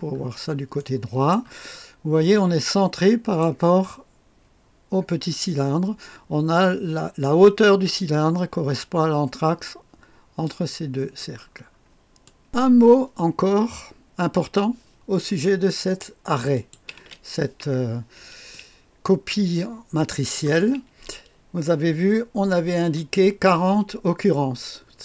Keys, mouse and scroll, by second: 0.1-0.7 scroll up 1, 0.7 right click, 1.7-3.4 scroll up 1, 11.4-12.2 scroll down 1, 12.2 right click, 12.4 Return, 12.4 click, 12.4 KP_3, 12.4 KP_4, 12.4 KP_0, 13.7-16.2 scroll up 2, 16.5 click, 17.0 space, 18.6-19.8 drag, 19.8 right click, 20.4 click, 20.9 space.